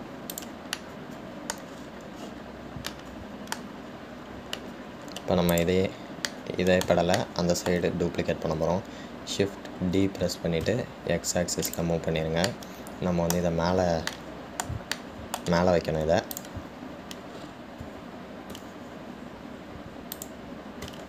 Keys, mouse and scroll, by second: 1.5 drag, 2.0-2.9 middle drag, 2.9-4.1 scroll down 12, 4.1-5.1 middle drag, 5.1 scroll down 2, 5.8-6.7 middle drag, 6.7 click, 7.5-11.2 middle drag, 11.2 shift+d, 13.6-17.5 middle drag, 17.5 click, 18.5 scroll up 1, 19.8 g.